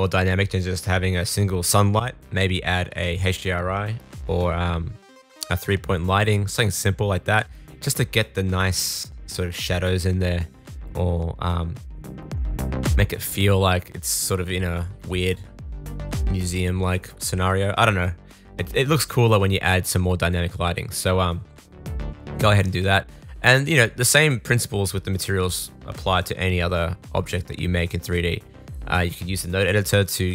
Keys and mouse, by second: 3.5 middle click, 3.5 right click, 5.3-7.9 middle drag, 5.3-7.9 right drag, 11.2 shift+a, 14.1 alt+g, 14.6 s, 16.9 s, 19.6 middle click, 19.9-21.8 middle drag, 25.3 middle click, 26.3 middle click, 26.4 click, 27.3-28.6 drag.